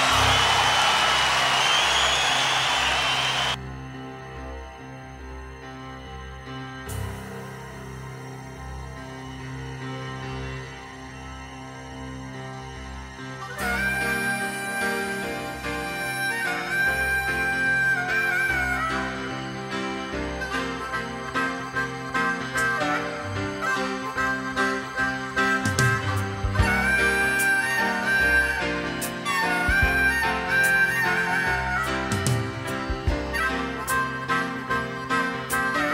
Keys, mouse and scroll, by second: 0.1 Tab, 1.2 ", 4.1-7.5 middle drag, 6.1-6.8 scroll up 2, 6.8-7.5 scroll up 1, 7.5-10.3 shift+right drag, 9.9 click, 9.9 middle click, 12.1 middle click, 12.1-13.8 scroll up 2, 15.7 z, 15.8-16.9 middle drag, 17.5-18.5 middle drag, 18.6-19.6 middle drag, 21.3 middle click, 21.7-24.6 right drag, 23.8 Tab, 26.0-31.7 right drag, 28.7 click, 29.4 click, 31.7 middle drag, 31.8-33.2 right drag, 33.2 shift+middle click, 33.7 shift+d, 34.0-35.0 right drag, 35.0 middle click, 35.8-35.9 middle drag.